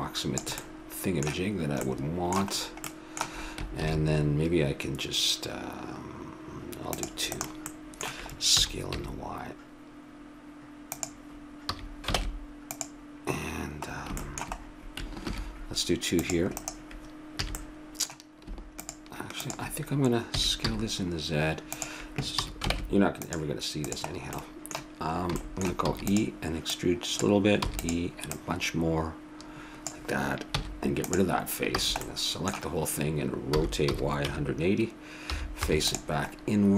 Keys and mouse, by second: 3.8 ctrl+r, 7.7-9.4 middle drag, 8.6 s, 11.6 a, 12.2 ctrl+Tab, 13.9 middle click, 15.2 ctrl+r, 17.4 a, 18.8-21.4 drag, 20.3 s, 22.4 a, 22.7 ctrl+Tab, 25.8 e, 26.6-30.1 drag, 27.6 e, 30.6 x, 31.7 a, 32.0-33.8 middle drag, 33.5 r.